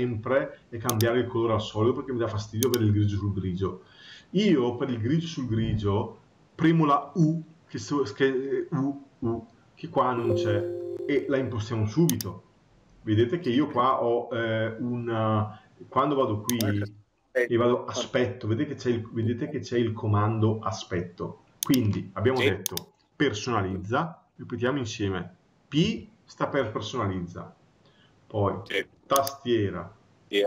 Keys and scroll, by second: 10.9 Escape.